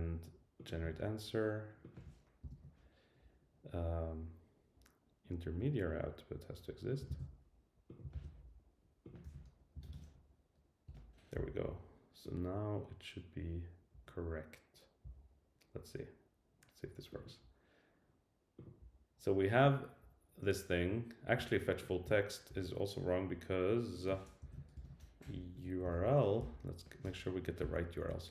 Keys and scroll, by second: 7.1 super+c, 8.1 super+v, 10.9 Return, 24.4 super+Left, 24.7 Return.